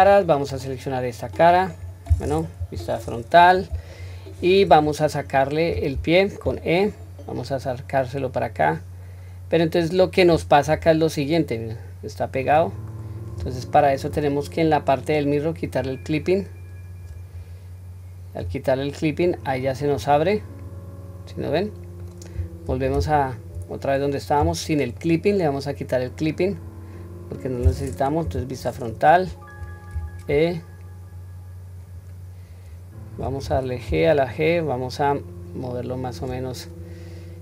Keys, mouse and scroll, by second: 1.1 click, 1.8 scroll down 1, 2.6-2.9 scroll down 1, 2.6 KP_1, 3.3 scroll down 1, 3.9-4.5 shift+middle drag, 6.4 e, 15.7 click, 18.4 g, 20.3-22.1 middle drag, 22.7 ctrl+z, 25.0-26.3 middle drag, 26.6-27.4 scroll up 1, 27.4-28.0 scroll down 1, 28.2 KP_1, 28.9-29.7 scroll up 1, 29.7 scroll up 1, 29.9 e.